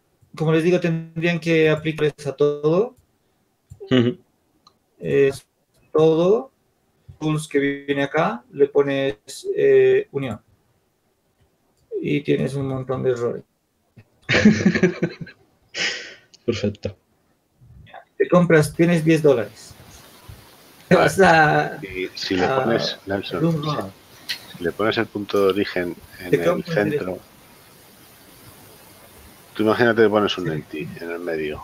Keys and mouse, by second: 4.8 ctrl+z, 5.6 b, 8.0-12.2 drag, 12.3 click, 14.1 ctrl+z, 16.0-18.1 drag, 18.1 ctrl+alt+u, 29.9-31.0 drag, 31.0 ctrl+z.